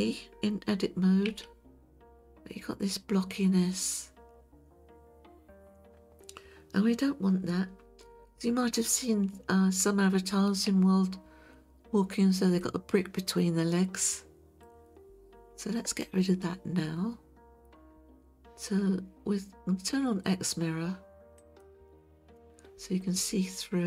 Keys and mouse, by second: 1.3 Tab, 12.6-14.6 shift+middle drag, 21.4 click.